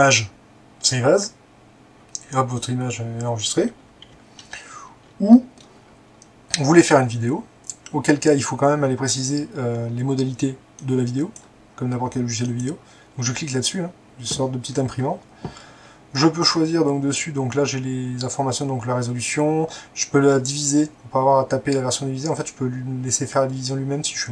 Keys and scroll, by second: 4.1 Escape.